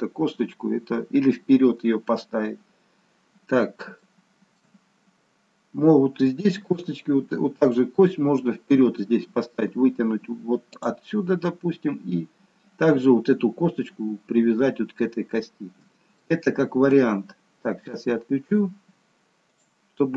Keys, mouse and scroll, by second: 2.5-3.9 scroll down 1, 4.3 shift+middle click, 4.3-5.3 scroll down 1, 5.3 scroll up 1, 10.8 click, 16.2 shift+middle click, 17.1-17.9 scroll up 1, 19.7 click.